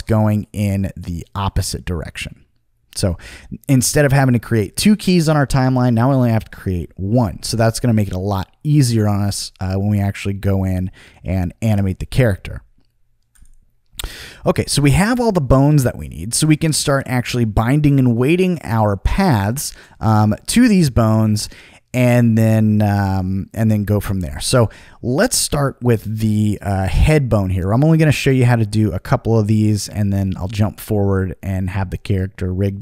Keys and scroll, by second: 7.5 super+z.